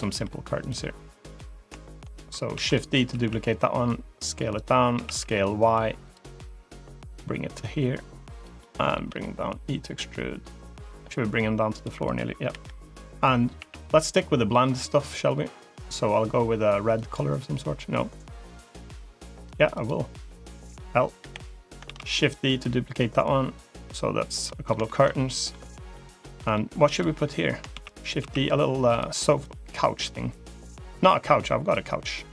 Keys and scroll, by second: 2.4 shift+d, 2.9 s, 4.8 s, 8.9 e, 12.4 l, 13.4 g, 17.7 g, 21.1 l, 21.7 shift+d, 27.6 shift+d, 28.0 s.